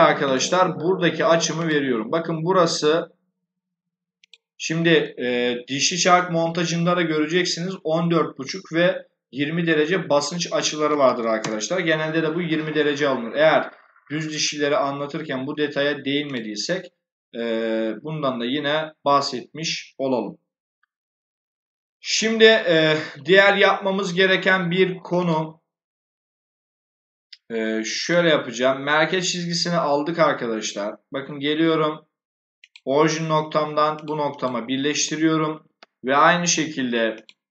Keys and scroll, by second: 10.5-11.4 typing.